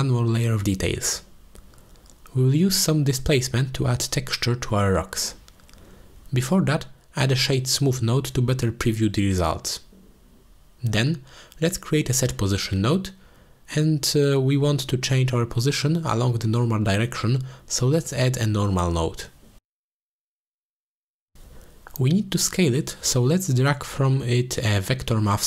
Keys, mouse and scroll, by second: 0.9 shift+drag, 1.6-3.3 middle drag, 3.8 shift+middle click, 4.1 middle click, 4.4 ctrl+space, 4.9 shift+middle drag, 6.4 click, 7.7 shift+a, 10.4 shift+a, 13.2 middle click, 13.7 middle drag, 14.1 click, 14.5 click, 15.1 click, 15.4 shift+d, 17.5 click, 18.2 shift+a, 23.1 middle click, 23.5-25.4 drag.